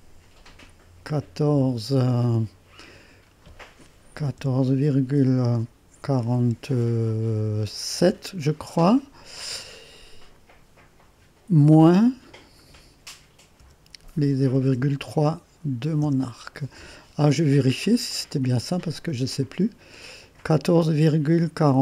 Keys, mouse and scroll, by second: 4.2 1, 4.6 4, 5.2 ., 6.4 4, 8.0 7, 13.6-15.2 typing, 16.0 Return, 18.1 click, 19.4-21.8 drag.